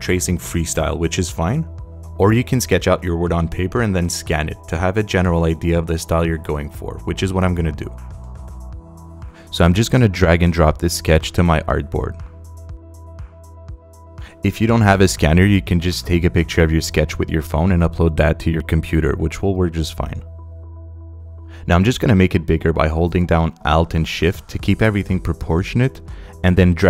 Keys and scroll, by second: 20.2 space.